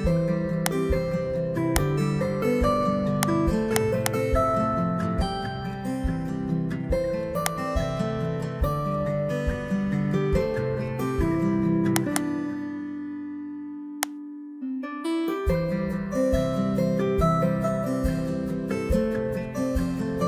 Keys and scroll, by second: 10.8 ctrl+c, 14.9 Return, 15.7 Up, 17.0 ctrl+v.